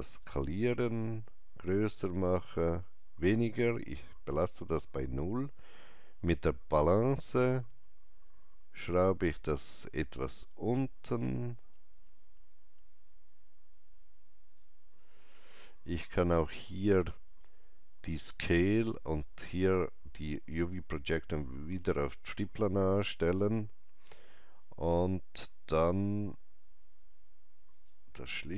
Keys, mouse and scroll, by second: 6.8-16.8 drag, 6.8-7.1 scroll down 1, 16.4-16.8 scroll up 1, 19.5 click, 21.8 click, 25.6 click, 25.6 scroll down 1, 27.7 click.